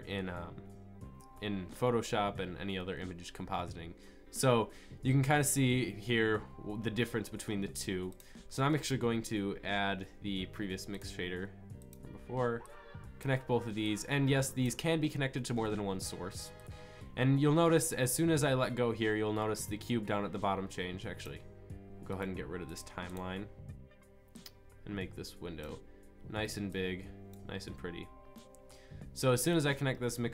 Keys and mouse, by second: 13.2-16.0 drag, 22.2 click.